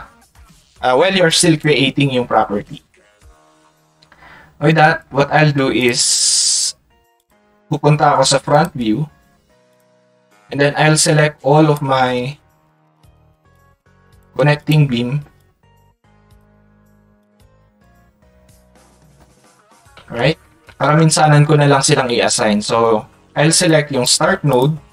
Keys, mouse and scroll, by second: 1.4 click, 5.8 click, 24.1 click, 24.5 click.